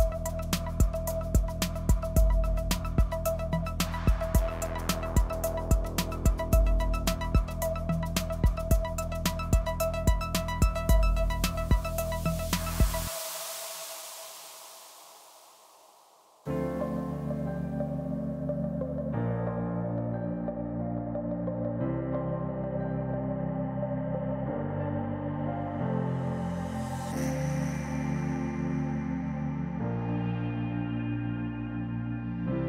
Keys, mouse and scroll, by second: 0.1 ctrl+z, 0.4 ctrl+z, 1.5 click, 2.1-2.8 scroll down 1, 2.8 click, 4.1 KP_3, 5.2 s, 7.4 g, 8.7 middle click, 9.0 Tab, 9.2 click, 9.4-10.4 middle drag, 10.4-10.7 scroll down 2, 10.7 click, 11.5 click, 11.8 middle click, 12.7-13.3 drag, 16.1 g, 20.0-20.7 drag, 21.1 click, 22.5 click, 23.0 drag, 23.4 g, 25.0 click, 25.3 click, 26.1 KP_0, 27.1 scroll down 1, 27.2-27.6 middle drag, 27.6-28.1 scroll up 2, 28.1-28.4 scroll down 1, 28.8 click, 29.9 click, 30.6 click, 31.2 shift+d.